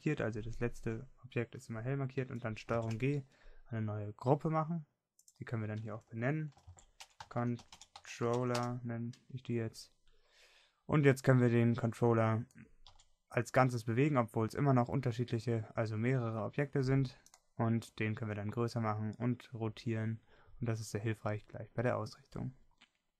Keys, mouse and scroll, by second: 4.1 ctrl+g, 9.5 l, 11.7-13.3 drag, 13.3-15.1 middle drag, 14.3 g.